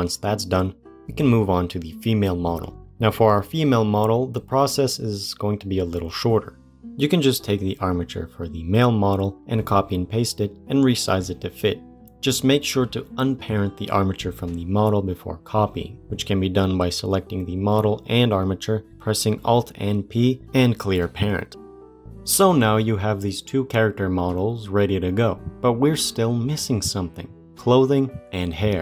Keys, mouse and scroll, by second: 6.7 click, 7.7 ctrl+c, 8.0 ctrl+v, 8.8 g, 16.6 click, 17.1 shift+click, 18.6 alt+p, 22.1 scroll up 2.